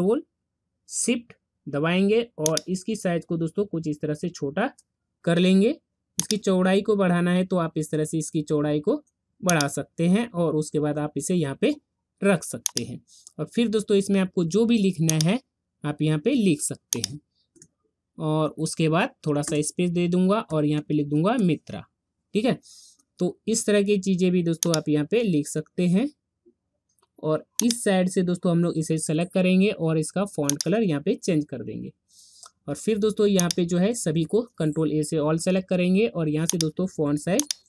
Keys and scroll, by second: 34.5 ctrl+a.